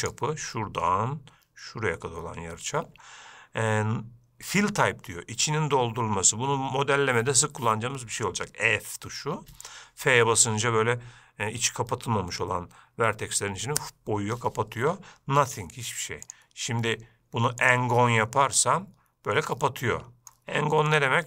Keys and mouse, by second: 16.6-18.0 drag, 18.7-20.5 middle drag, 21.1-21.2 drag.